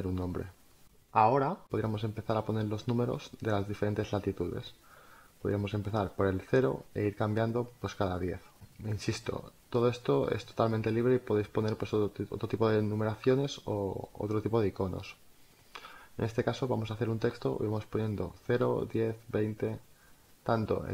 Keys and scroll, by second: 0.1-2.1 typing, 5.8 0, 9.0 1, 11.7 t, 12.2 2, 12.6 0, 14.6-15.7 typing, 16.7 ctrl+z, 18.6 alt+space.